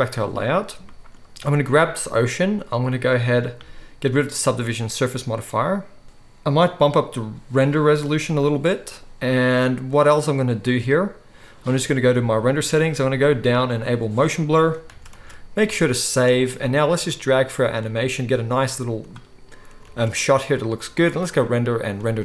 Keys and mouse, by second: 0.0 click, 0.0 middle click, 0.0-1.5 right drag, 1.5 middle click, 1.6 right click, 2.6 middle click, 3.3-4.4 right drag, 4.4-6.0 middle drag, 6.0 ctrl+s, 6.0 right click, 6.8-12.2 middle drag, 12.2-13.8 right drag, 13.8 middle click, 14.9 ctrl+s, 15.2 ctrl+s, 17.0-17.3 middle drag, 19.9 ctrl+s.